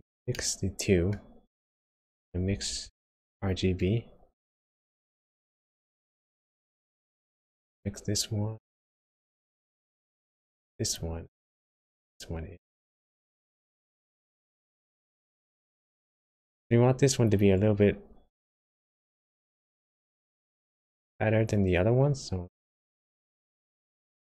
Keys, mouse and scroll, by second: 0.3 middle click, 2.8 shift+a, 7.7 click, 10.0 click, 11.9 click, 15.7 middle click, 16.5 scroll up 1, 17.2 click, 18.7-19.3 scroll up 4, 19.3-19.6 scroll down 2, 19.6 middle click, 20.5 scroll down 1, 21.4 click.